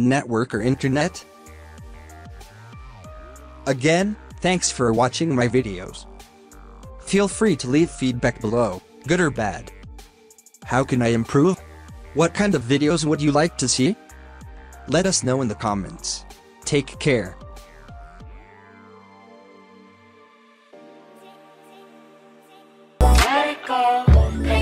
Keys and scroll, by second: 3.0 typing.